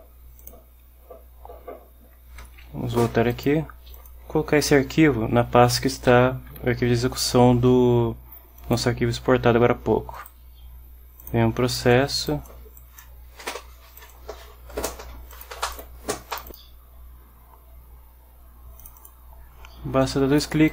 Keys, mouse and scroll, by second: 0.5 click, 2.5 ctrl+x, 3.4 ctrl+click, 4.0 click, 6.2 ctrl+v, 8.7 click, 10.2 right click, 12.9 click, 14.1 click, 15.4 click, 15.8 click, 16.4 click, 18.9 click, 20.1 click.